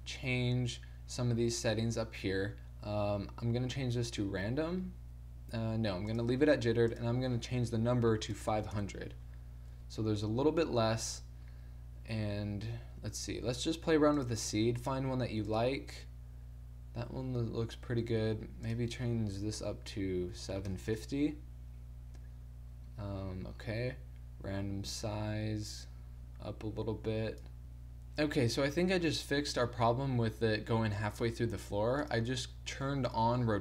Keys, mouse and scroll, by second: 8.6 KP_0, 13.6-21.0 drag, 21.0 middle click, 21.7 scroll up 1, 21.9 middle click, 22.7 middle click, 25.0-27.6 middle drag, 32.1-33.6 middle drag.